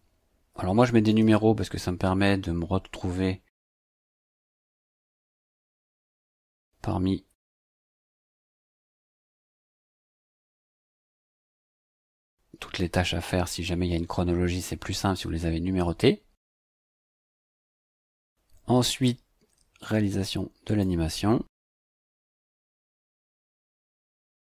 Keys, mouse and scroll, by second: 0.5 KP_3, 0.8 KP_Subtract, 1.0 space, 3.5 click, 4.8-6.5 typing, 7.9 BackSpace, 9.7-10.7 typing, 11.5 click, 16.9 click, 19.8 click, 21.5 ctrl+c, 22.4 click, 22.8 ctrl+v, 24.0 click.